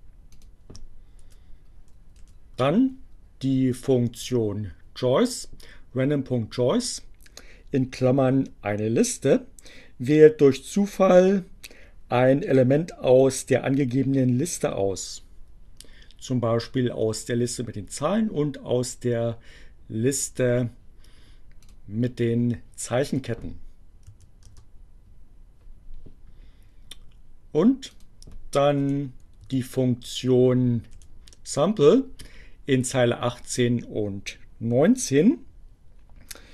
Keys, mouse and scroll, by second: 0.3 click, 2.0 Delete, 4.3 Delete, 21.5 click, 23.2 click, 23.7 Up, 24.3 Return, 28.0 click, 28.8 Delete, 29.1 Down, 30.3 Delete.